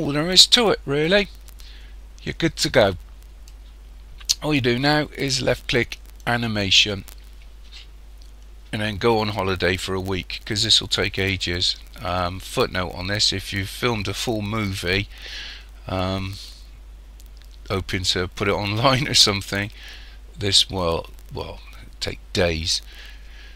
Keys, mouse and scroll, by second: 2.7 click, 6.2 click.